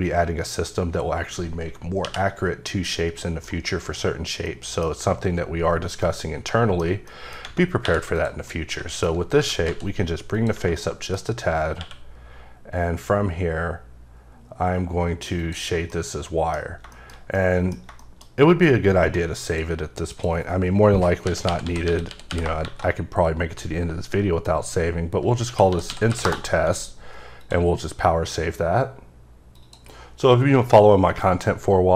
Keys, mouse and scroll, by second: 3.2 middle click, 3.4 scroll up 1, 4.4 middle click, 6.0 middle click, 7.1 middle click, 7.8 3, 8.2 click, 8.5 middle click, 9.4 g, 9.6 z, 10.3 click, 10.8 middle click, 11.8 q, 15.4 click, 15.9 middle click, 16.4-17.2 typing, 16.6 scroll down 1, 16.9 shift+middle click, 19.4 click, 20.1 click, 21.4-22.3 typing, 25.4-26.1 typing, 26.3 Return, 27.4 click.